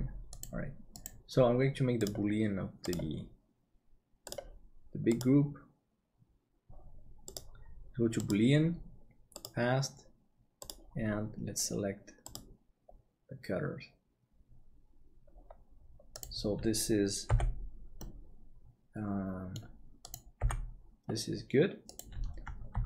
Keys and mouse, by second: 2.7-17.3 drag, 17.3 h, 18.0-19.5 middle drag, 20.4 h.